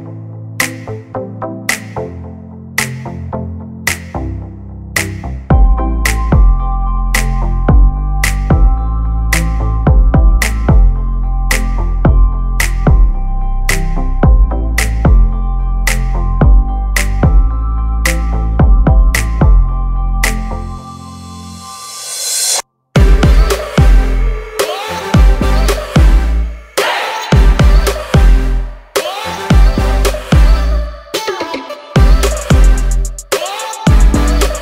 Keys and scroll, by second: 5.6 Escape, 7.4 m, 9.1 space, 10.6 l, 12.2 space, 12.4 f, 13.4 Return, 14.2 space, 16.1 s, 17.5 space, 17.9 p, 19.5 space, 20.3 Delete, 20.9 Escape, 22.0 Delete.